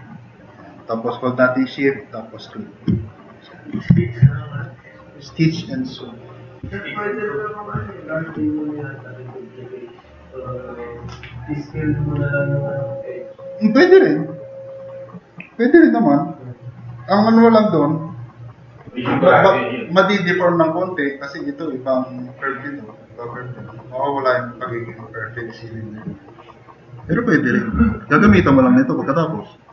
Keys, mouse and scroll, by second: 3.1 click, 3.9 4, 4.4-7.1 drag, 28.3 e.